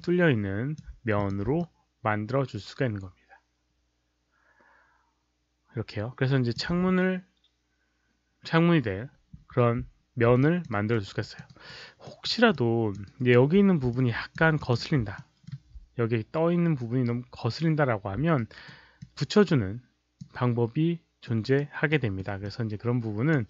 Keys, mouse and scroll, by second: 1.1 click, 1.5-6.4 alt+drag, 10.4 alt+click, 10.6 alt+right click, 11.1 alt+click, 11.4 alt+right click, 11.9 alt+middle click, 12.4 alt+click, 13.0 alt+right click, 13.9 alt+click, 14.5 click, 15.1 alt+middle click, 18.3 alt+right click, 18.9-20.1 alt+drag, 21.1 alt+right click, 21.8 alt+middle click, 22.3 alt+click.